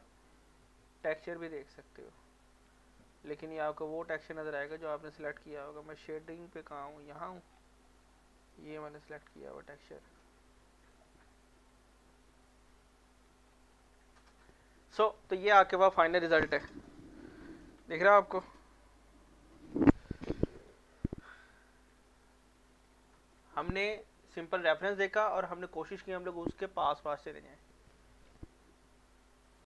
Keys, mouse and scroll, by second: 1.5 middle click, 3.9 click, 6.7 scroll down 1, 7.9 middle click, 8.5 click, 11.3-13.2 middle drag, 13.2 scroll down 1, 13.5 middle click, 13.9 shift+middle click, 14.3 middle click, 20.9 scroll down 1, 21.0-22.8 middle drag, 22.8 scroll up 1, 23.1 middle click, 23.5 shift+middle click, 29.6 click.